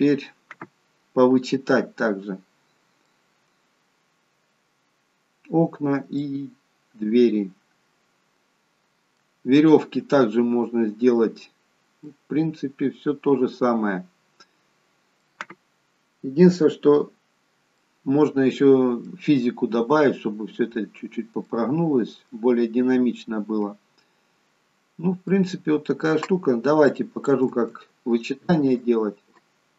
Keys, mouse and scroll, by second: 3.4-4.5 scroll down 1, 5.4 scroll down 2, 6.1 middle click, 10.8-11.3 scroll up 1, 11.3 scroll down 1, 11.5 scroll down 1, 12.1 middle click, 17.2-17.7 scroll up 1, 17.7 middle click, 19.7 scroll down 1, 20.4-20.7 scroll down 1, 21.4 middle click, 22.6 scroll up 2, 23.2-24.3 scroll down 1, 24.7-25.2 scroll up 1, 25.2 middle click, 26.9 shift+click, 28.4 shift+right click.